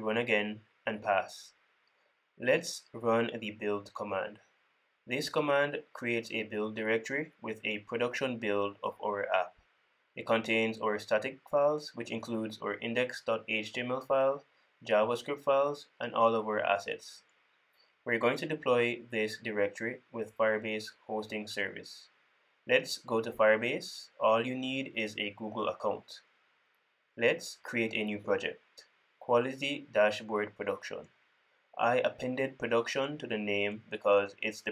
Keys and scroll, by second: 0.2 super+s, 3.9 super+w, 11.5 super+b.